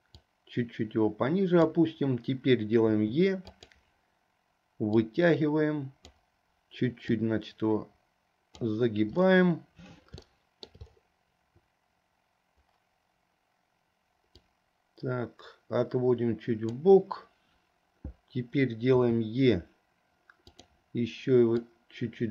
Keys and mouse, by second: 0.2-1.8 drag, 3.0 e, 5.0-6.3 drag, 7.2-8.8 drag, 10.4 shift+middle click, 19.1 e, 21.8-22.3 drag.